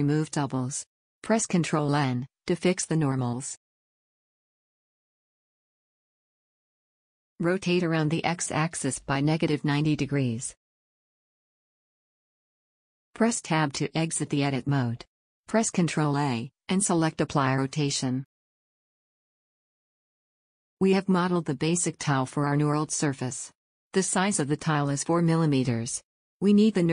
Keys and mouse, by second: 2.0 ctrl+n, 7.6 r, 10.6-14.1 drag, 14.1 Tab, 16.2 ctrl+a, 26.6-26.9 middle drag.